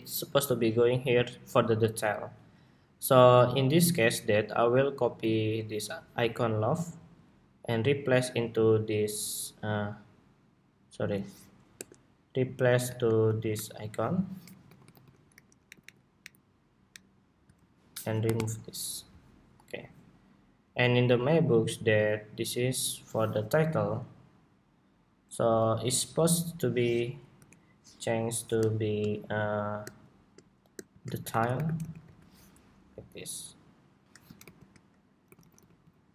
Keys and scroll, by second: 5.1 super+c, 13.0 shift+super+v, 32.6 ↺, 34.1 alt+shift+Left, 35.7 alt+Left.